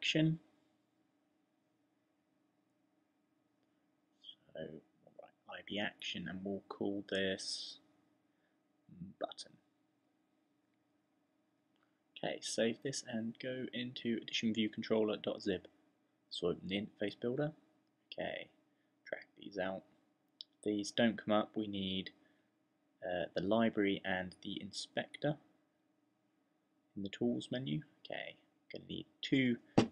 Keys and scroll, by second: 3.2-6.1 typing, 8.5-11.0 typing.